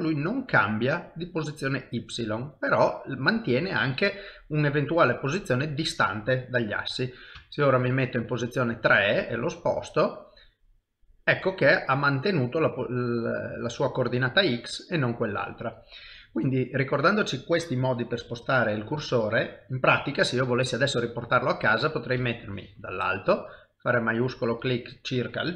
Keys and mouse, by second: 2.9 middle click, 7.4 KP_3, 9.1 shift+right click, 10.8 middle click, 14.4 middle click, 22.2 KP_7, 24.4 shift+right click.